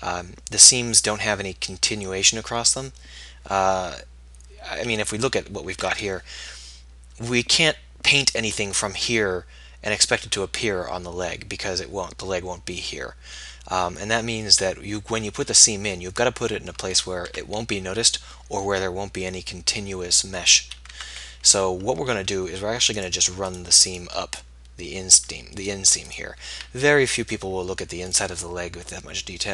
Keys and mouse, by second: 5.4 a, 6.0 a, 16.4 middle click, 17.3 Tab, 21.1 Tab, 25.2-27.2 middle drag.